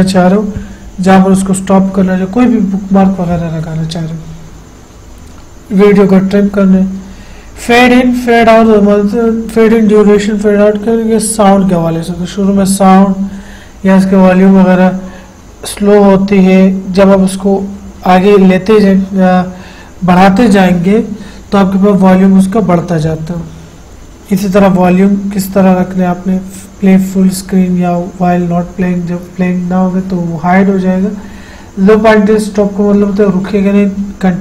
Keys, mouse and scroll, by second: 24.6 click.